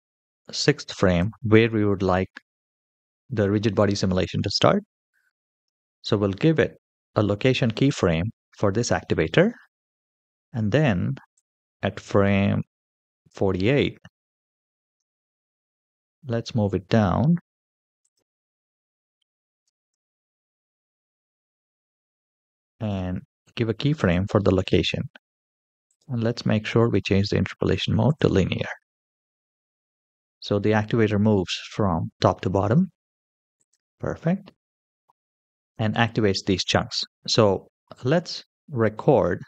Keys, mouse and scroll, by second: 5.4 i, 11.2 click, 14.2 g, 18.4 middle click, 19.4 g, 22.6 i, 28.0 right click, 29.0 click, 29.5 space, 30.4-31.5 middle drag, 32.4 space, 33.3 click.